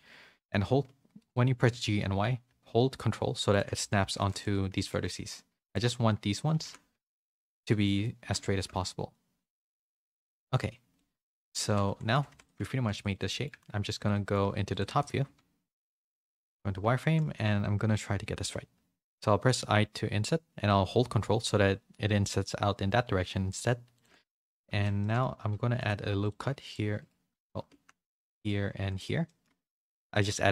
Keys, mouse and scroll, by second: 1.5 g, 3.8 a, 3.9 a, 4.1 c, 4.6 g, 6.5 g, 8.7 g, 10.9 middle click, 11.3 Tab, 11.5 z, 12.1 a, 12.3 a, 12.3 click, 12.5 Tab, 12.7 3, 12.9 click, 13.1 middle click, 14.1 middle click, 14.7 shift+click, 15.5 KP_7, 16.3 z, 16.9 shift+middle click, 18.4 i, 24.2 middle click, 25.0 middle click, 25.0 z, 25.3 ctrl+r, 26.7 ctrl+r, 27.3 ctrl+z, 27.8 ctrl+z, 28.1 ctrl+r, 29.3 middle click, 29.6 2.